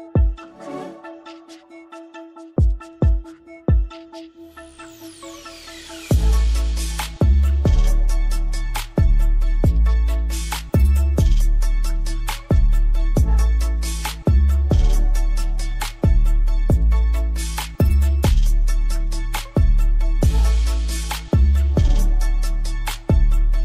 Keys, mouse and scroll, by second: 1.9-2.4 scroll down 1, 2.4 shift+click, 7.7 click, 15.7 click, 17.3 scroll up 1, 18.5 right click, 19.4 click, 21.5 click, 23.2 right click.